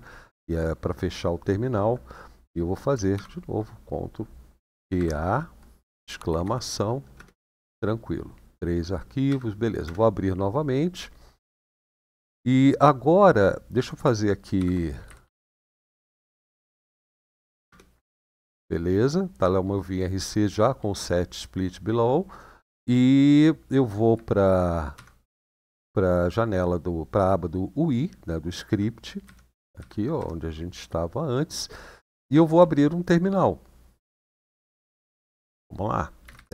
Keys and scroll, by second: 2.9 typing, 4.5 typing, 6.0 typing, 6.9 Return, 9.0 Up, 9.3-10.1 typing, 14.3-16.7 typing, 17.4 Return, 24.7 ctrl+Page_Down, 29.1 Page_Down, 29.5 Page_Down, 29.9 Page_Down, 33.8 shift+;, 36.0-36.5 typing.